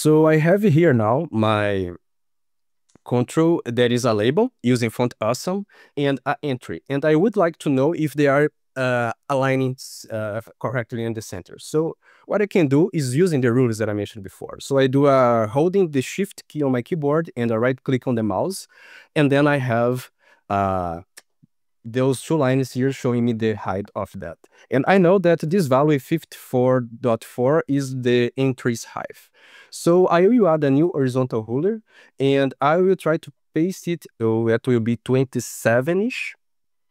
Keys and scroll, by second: 4.3 ctrl+shift+k.